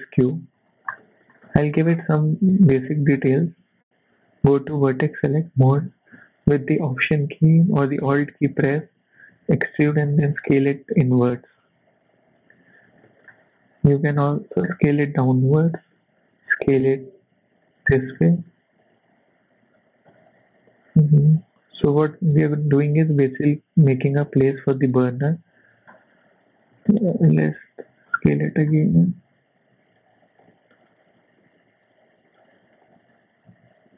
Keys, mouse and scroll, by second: 0.3 scroll up 1, 0.6 click, 0.9-1.4 scroll down 3, 1.0 shift+middle click, 1.4 middle click, 1.9-2.4 scroll up 6, 2.4 Tab, 3.8 click, 5.0 alt+click, 6.1 middle click, 7.8 shift+middle click, 8.1 scroll up 2, 8.4 shift+middle click, 8.7 scroll down 3, 9.0 shift+middle click, 9.6 e, 13.0 shift+middle click, 13.3 scroll up 1, 13.9 e, 16.5 s, 17.9 shift+middle click, 18.3 middle click, 18.8 e, 22.1 shift+middle click, 22.7 middle click, 24.2 shift+middle click, 24.6 scroll up 1, 24.8 shift+middle click, 25.9 scroll up 1, 26.3 e, 28.3 shift+middle click, 28.6 scroll up 2, 29.0 s, 30.4 e, 32.8 e.